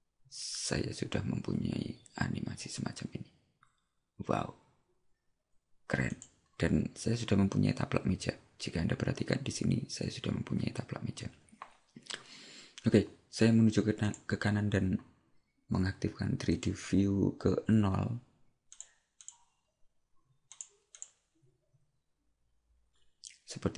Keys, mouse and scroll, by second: 6.4 click, 14.1 click.